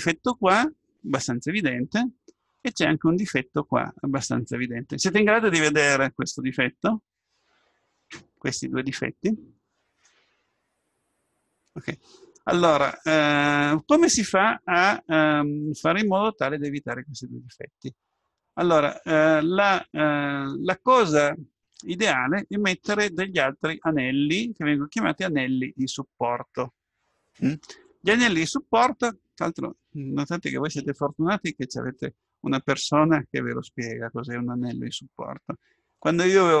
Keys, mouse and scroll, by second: 0.0-2.1 middle drag, 6.9-8.8 middle drag, 16.2-17.8 scroll up 1, 17.8-19.4 scroll up 1, 19.4-22.6 middle drag.